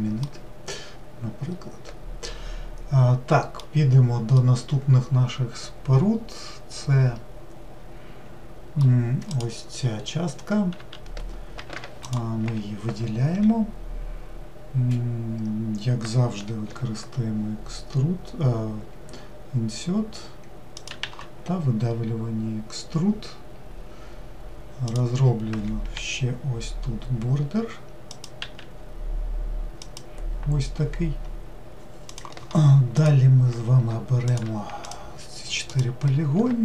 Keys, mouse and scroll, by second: 0.2-12.0 middle drag, 12.0 ctrl+shift+click, 34.0 shift+click, 34.5-36.6 shift+drag.